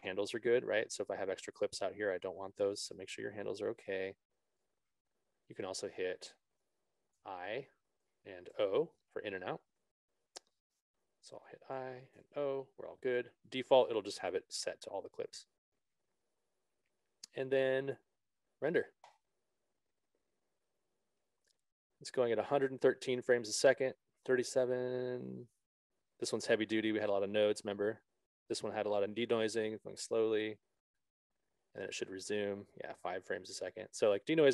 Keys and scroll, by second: 7.5 i, 9.1 o.